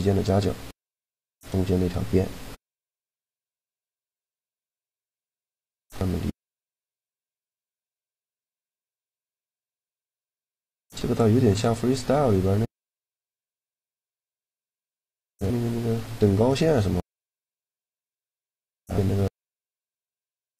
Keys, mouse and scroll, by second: 0.2 middle click, 0.6-1.9 drag, 1.9 right click, 2.9-4.1 middle drag, 4.1-5.6 drag, 11.1-14.1 middle drag, 14.1 Tab, 17.8 Tab, 18.6 a.